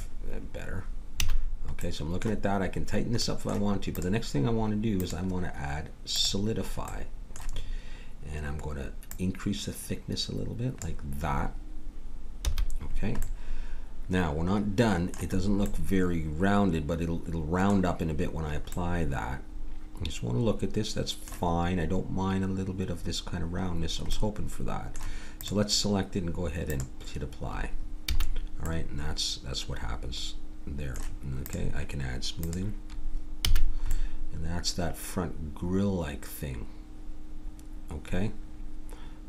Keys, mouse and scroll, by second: 1.2 a, 7.1 middle click, 7.6-9.1 middle drag, 9.1-11.0 drag, 12.5 a, 13.3 middle click, 19.5-20.5 middle drag, 24.2 middle click, 25.4-26.7 middle drag, 26.7-28.3 drag, 28.1 a, 31.6-34.4 drag, 33.4 a, 34.4-35.9 middle drag.